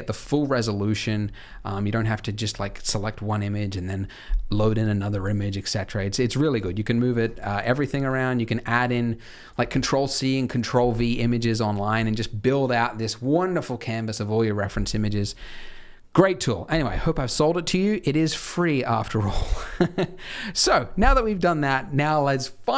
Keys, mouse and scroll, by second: 18.1-20.6 scroll down 1, 20.6 click.